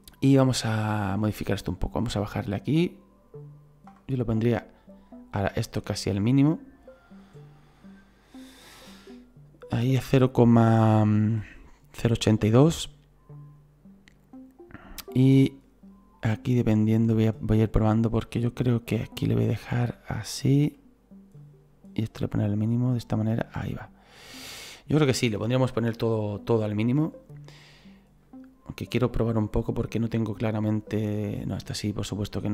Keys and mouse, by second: 1.8 click, 14.2 click, 21.4 click, 22.7 click, 25.3 middle click, 28.2 click, 30.1 click.